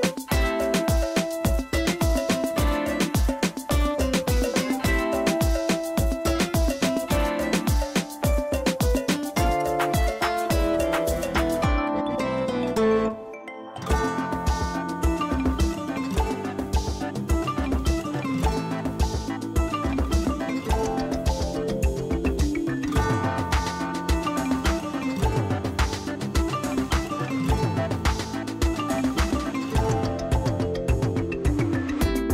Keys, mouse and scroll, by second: 1.4 click, 11.4 ctrl+Return, 13.3 shift+F6, 16.6 s, 18.8-19.5 typing, 20.8 alt+click, 21.2 click, 30.2 alt+click, 30.8 alt+click, 31.9 alt+click.